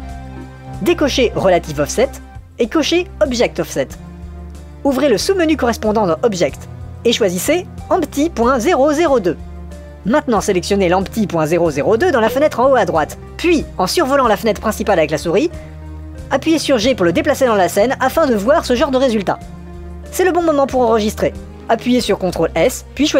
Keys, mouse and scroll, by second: 2.0 click, 3.4 click, 4.9 click, 7.1-8.6 drag, 12.6 click, 17.1 g, 22.8 ctrl+s.